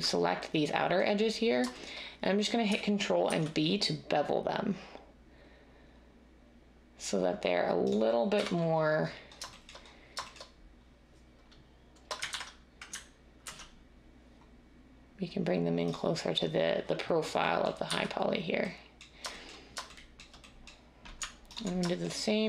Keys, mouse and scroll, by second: 3.2 ctrl+b, 8.4 1, 12.3 ctrl+z, 13.5 ctrl+b, 17.8 z.